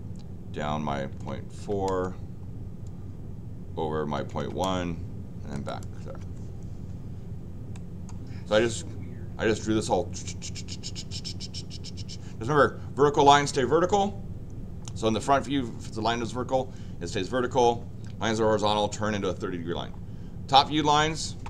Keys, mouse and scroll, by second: 5.6 click, 7.7 middle click.